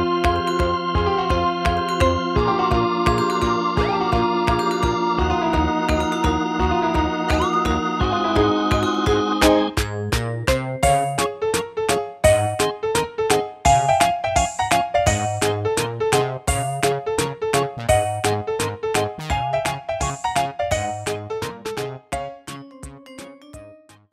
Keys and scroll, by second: 3.2 ctrl+d.